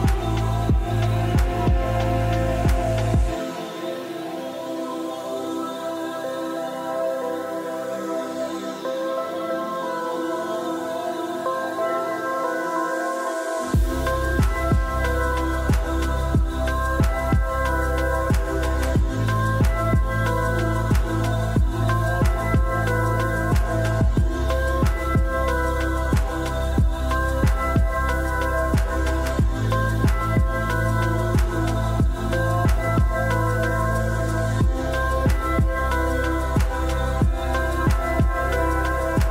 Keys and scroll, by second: 17.0 Tab, 17.1-18.7 typing, 22.0 Delete, 24.1 Delete.